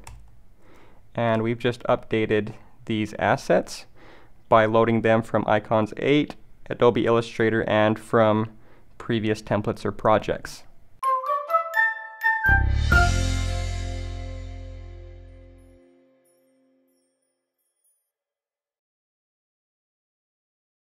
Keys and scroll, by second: 0.3 alt+Left.